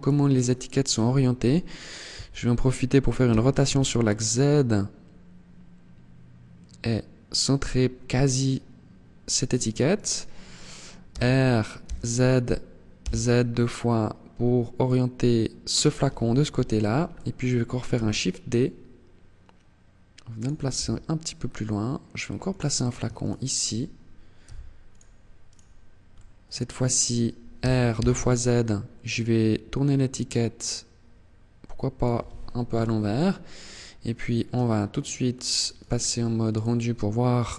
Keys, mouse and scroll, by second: 2.3 r, 8.8 click, 9.1 right click, 10.1 r, 14.9 click, 15.6 KP_7, 17.1 shift+d, 19.5 click, 19.9 r, 22.3 shift+right click, 23.6 g, 24.2 click, 24.6 right click, 25.2 middle click, 26.7 r, 31.1 click, 31.9 KP_0, 32.7 scroll down 2, 34.4 click, 34.9 click.